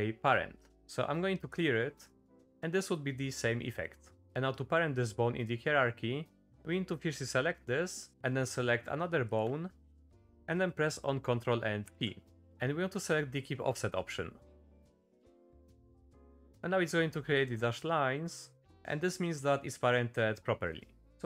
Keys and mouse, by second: 2.7 shift+middle click, 4.0 middle click, 8.4 middle click, 11.8 ctrl+p, 20.9 middle click, 21.1 g.